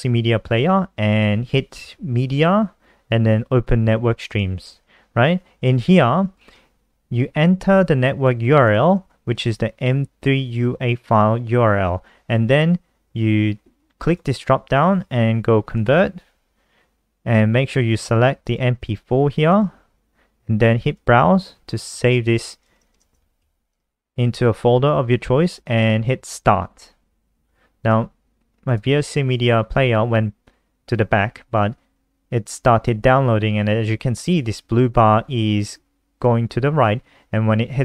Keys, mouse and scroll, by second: 2.0 click, 6.8 BackSpace, 8.9 click, 9.5 ctrl+v, 14.3 click, 22.8-24.2 typing, 26.6 click.